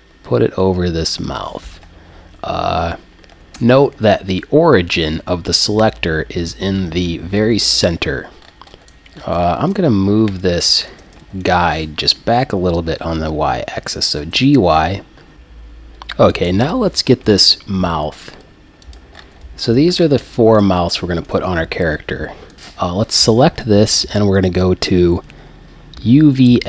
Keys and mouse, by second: 3.2 click, 3.6 Tab, 8.8 alt+g, 8.8 click, 8.8-10.1 right drag, 14.3 g, 16.3 right click, 17.2 g, 17.9-18.3 drag, 18.9-20.0 drag, 20.4 click, 20.6 g, 20.6 click, 20.8-21.1 right drag, 22.5-24.5 right drag, 24.5-26.3 drag.